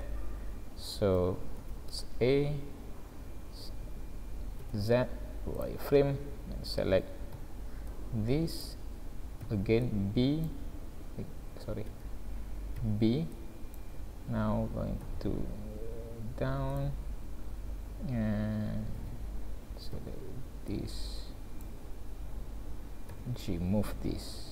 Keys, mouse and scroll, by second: 0.2-1.3 scroll up 4, 1.7 alt+a, 4.6 z, 6.5-7.0 scroll up 2, 7.3 b, 9.5 b, 11.0 v, 12.8 b, 14.0 scroll down 2, 15.1 g, 19.1 alt+a, 19.9 b, 23.1 g.